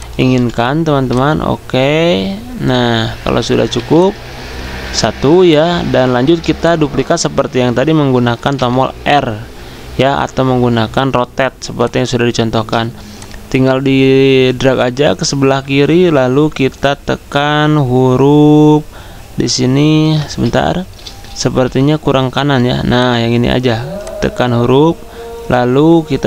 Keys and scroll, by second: 0.0-0.3 typing, 3.7 z, 4.8 v, 6.5 space, 20.3 ctrl+z, 21.4 r.